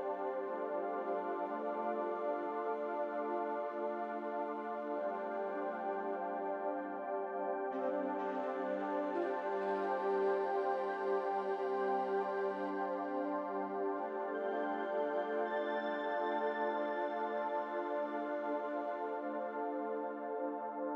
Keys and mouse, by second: 0.3 ctrl+r, 3.9 ctrl+r, 7.2 3, 8.3 click, 9.7 middle click, 12.1 e, 17.7 Tab, 20.4-20.8 middle drag.